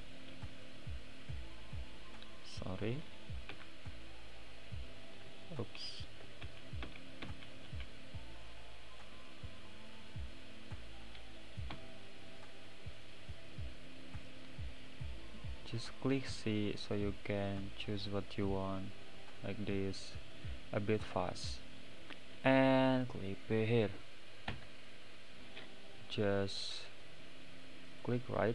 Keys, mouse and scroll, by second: 2.7-3.9 middle drag, 3.9 c, 9.2 click, 10.4 click, 11.7 c.